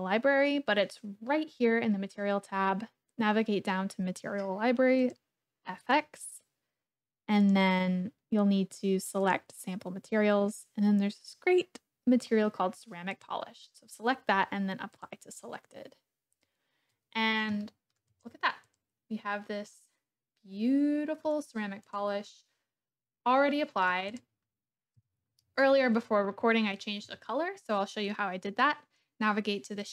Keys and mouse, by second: 5.0 click, 7.5-9.3 drag, 13.1 click, 15.1-16.8 drag, 17.6-18.0 shift+drag, 18.1 click, 18.7 click, 19.7-21.3 middle drag, 21.8 middle click, 22.3-23.9 middle drag, 24.1 click, 25.0 KP_1.